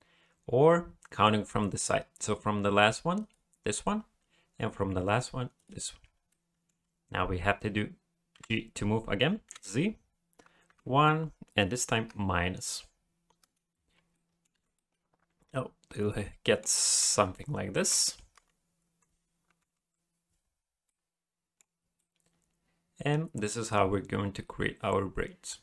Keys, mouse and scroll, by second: 2.2 click, 3.2 click, 5.6 shift+click, 6.3 middle click, 8.3 g, 14.1 middle click, 14.5 alt+a, 14.7 middle click, 17.1 KP_1, 18.2 KP_9, 19.6 KP_3, 20.8 middle click, 21.8 scroll down 1, 22.0 middle click.